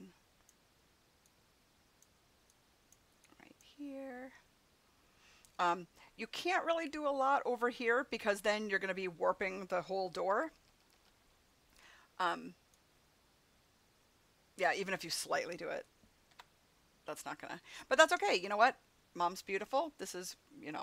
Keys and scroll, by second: 10.1 ], 16.3 ctrl+z.